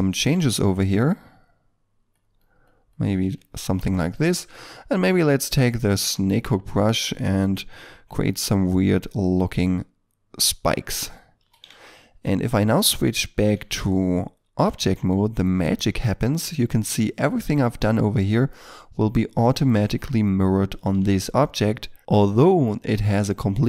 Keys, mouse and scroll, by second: 0.3 f, 0.8 double click, 3.3 ctrl+middle click, 4.2 middle click, 8.0 f, 8.8 double click, 11.7 ctrl+middle click, 14.4 Tab, 15.5 middle click, 21.2 ctrl+middle click.